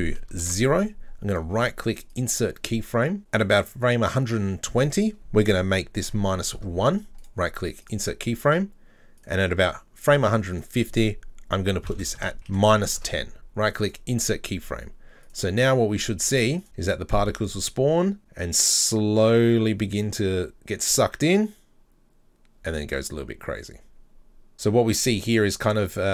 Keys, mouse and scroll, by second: 1.3-3.2 right drag, 3.2 click, 4.9-7.2 drag, 7.2-9.2 right drag, 9.2 click, 10.6-12.6 drag, 13.4-15.3 right drag, 15.3 drag, 16.6 drag, 24.5 click.